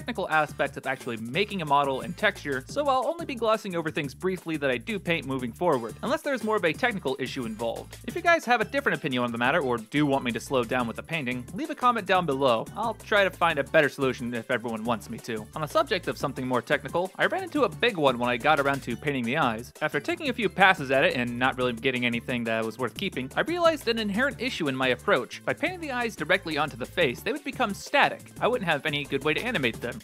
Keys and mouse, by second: 0.0 ctrl+z, 0.1 click, 0.2 click, 0.5 f, 0.6 click, 1.0 click, 1.2 click, 1.4 click, 1.6 click, 1.7 click, 2.1 click, 2.3 middle click, 2.6 click, 2.7 x, 2.8 click, 3.2 click, 3.5 click, 3.6 click, 3.8 middle click, 4.1 f, 4.3 click, 4.4 f, 4.5 click, 4.8 click, 4.9 r, 5.1 middle click, 5.2 middle click, 6.0 middle click, 6.2 middle click, 7.5 x, 8.1-9.2 drag, 9.8 click, 12.2 f, 12.2 r, 13.2 click, 13.8 click, 14.3 click, 14.8 click, 15.1 click, 15.5 click, 15.8 r, 16.2 click, 18.2 click, 19.2 f, 19.6 click, 19.8-21.8 middle drag, 22.3-24.1 ctrl+z, 24.5 middle click, 25.3 middle click, 26.0-29.0 ctrl+z, 26.2 middle click, 29.0 middle click, 29.9 middle click.